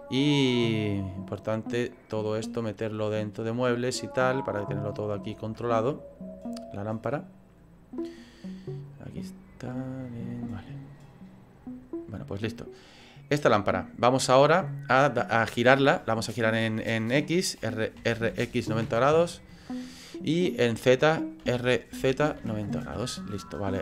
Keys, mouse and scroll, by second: 1.4 click.